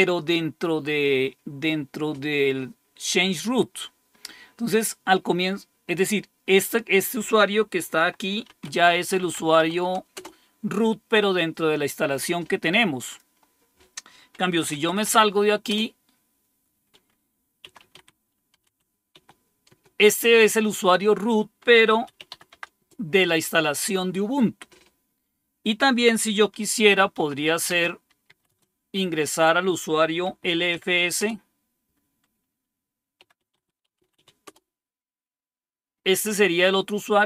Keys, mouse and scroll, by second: 4.7 click, 6.4 click, 7.9-10.0 typing, 10.1 Return, 13.0 click, 14.2-15.5 typing, 15.6 Return, 17.3-19.6 typing, 19.6 Return, 21.6-22.8 typing, 22.8 Return, 26.8-28.4 typing, 29.9-31.4 typing, 32.9-34.6 typing.